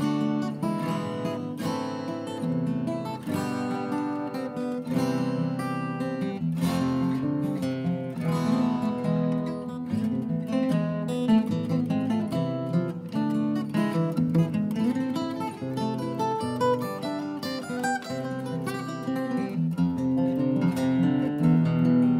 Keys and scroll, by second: 1.4 Delete, 17.2 Down, 17.3 Return, 18.6 Delete, 20.3 Escape, 20.3 Escape, 21.0 Escape, 21.1 shift+Right, 21.3 Escape, 22.0-22.1 typing.